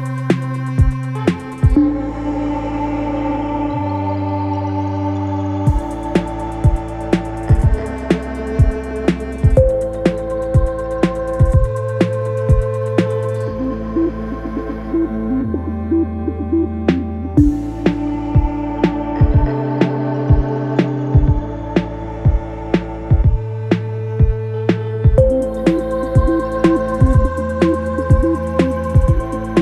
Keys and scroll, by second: 0.0 Delete, 0.5 ctrl+d, 0.6 Escape, 6.6 3, 23.9 4.